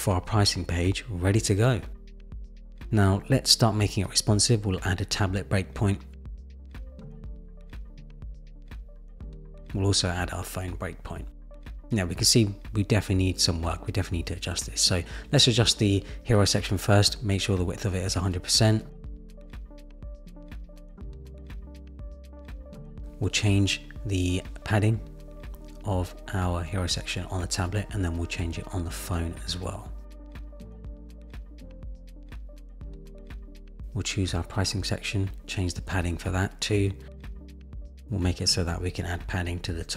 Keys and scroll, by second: 18.4 Return, 26.1 shift+Down, 26.8 shift+Down, 29.1 shift+Down, 30.0 shift+Down, 39.8 Return.